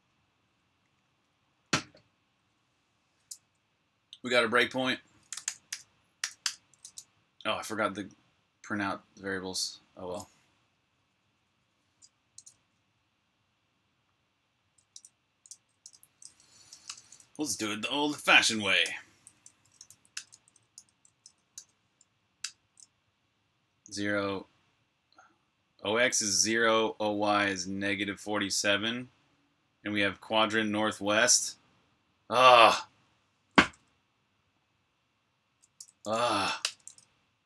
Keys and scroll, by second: 4.9-6.6 typing, 14.8 super+Tab, 15.7 p, 16.1 space, 16.6 q, 16.8 Return, 18.7-21.1 typing, 22.3 typing, 33.5 1, 35.7 BackSpace, 36.3 q, 36.5 Return.